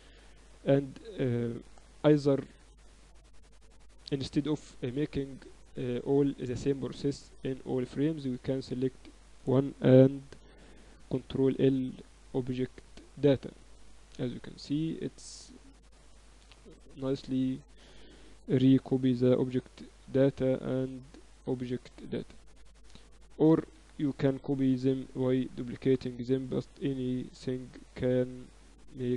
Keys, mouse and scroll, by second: 2.4-3.6 middle drag, 3.7-9.0 middle drag, 9.0-10.8 right drag, 11.0 ctrl+l, 14.0-15.6 right drag, 15.6-17.2 middle drag, 19.9 ctrl+l, 23.6 KP_7, 23.8 KP_8, 24.6 KP_7, 25.0 z, 26.9-28.9 drag, 29.1 Tab.